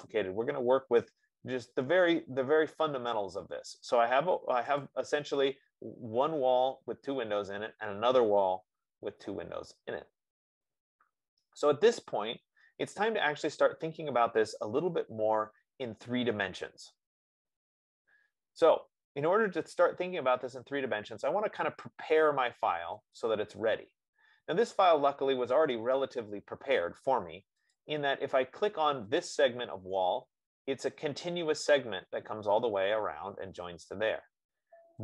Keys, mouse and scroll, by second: 5.1-10.1 drag, 23.7 click, 25.4 middle click, 26.2 middle click, 28.2 click, 29.7 click.